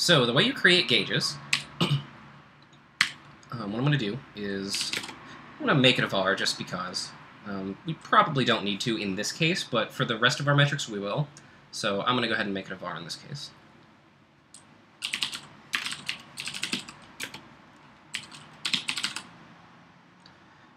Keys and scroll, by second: 1.7 i, 2.8-5.4 typing, 14.8-19.5 typing.